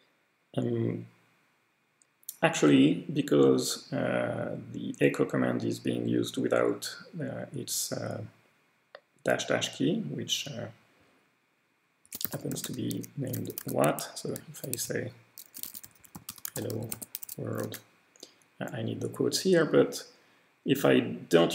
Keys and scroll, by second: 11.8-17.7 typing.